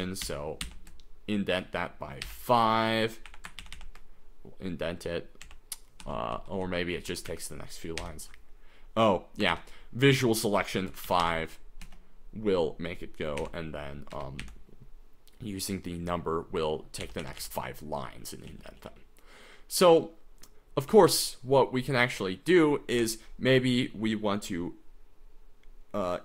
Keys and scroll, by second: 0.2-0.6 typing, 2.2-4.2 typing, 5.4 h, 6.0 Right, 6.3 Right, 6.6 Right, 6.9 Down, 7.3 Up, 8.2 u, 9.5 shift+v, 10.5-11.7 typing, 11.8 Escape, 13.4 y, 14.3 Escape, 14.4 u, 17.2 j, 17.4 j, 18.5 k, 18.7 k, 18.9 k, 20.9 k, 23.1 j.